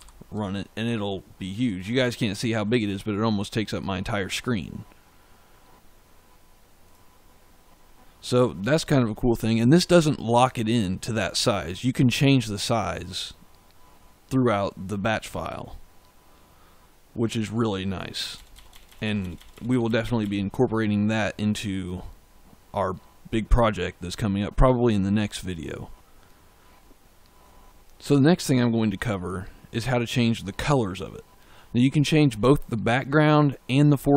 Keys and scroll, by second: 18.2 BackSpace.